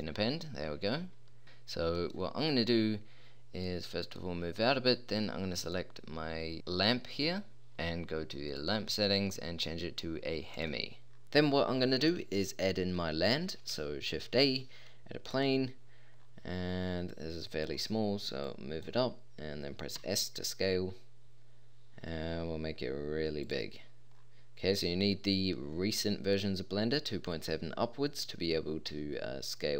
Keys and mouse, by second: 1.4 click, 5.5-6.5 middle drag, 8.5-10.3 drag, 14.1 shift+a, 15.8-16.2 middle drag, 17.1-17.5 drag, 20.0 s, 24.1 click, 28.9 s.